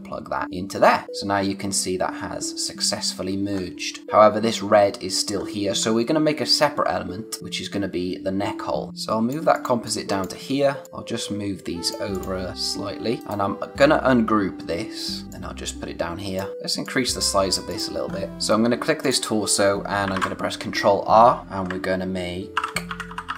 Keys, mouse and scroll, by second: 1.0-2.8 scroll up 1, 3.5-3.9 scroll down 1, 3.9-5.1 scroll up 1, 5.3-5.8 scroll down 1, 5.8 scroll up 1, 9.5 space, 9.8 click, 10.0 space, 10.8 click, 13.2 right click, 15.2 scroll down 1, 15.3 click, 18.1 scroll up 1, 18.3 space, 19.0 click, 20.1 ctrl+r, 21.4-23.3 typing.